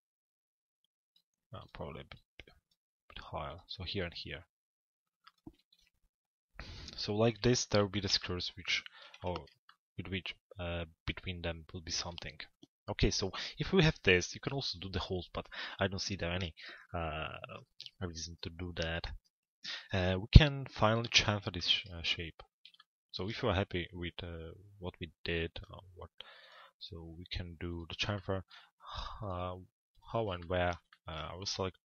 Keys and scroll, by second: 6.9 p.